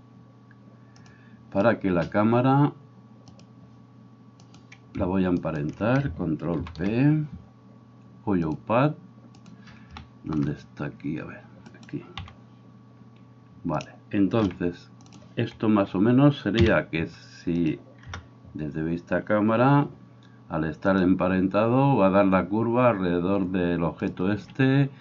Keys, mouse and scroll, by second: 3.3 click, 4.5 right click, 5.5 shift+right click, 6.6 ctrl+p, 9.4 right click, 10.0-17.6 shift+middle drag, 11.7 right click, 12.3 g, 14.4 r, 16.6 KP_Decimal, 17.6 click, 18.1-21.0 middle drag, 18.1 KP_0, 21.0-24.2 drag, 24.2-25.0 middle drag, 24.3 Escape.